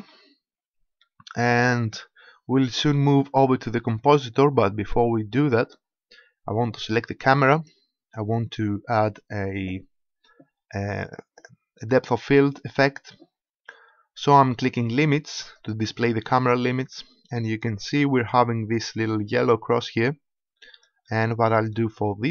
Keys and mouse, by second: 2.4 middle click, 4.9-6.4 middle drag, 7.5-9.3 right drag, 11.0 click, 12.7-15.5 middle drag, 16.9 middle click.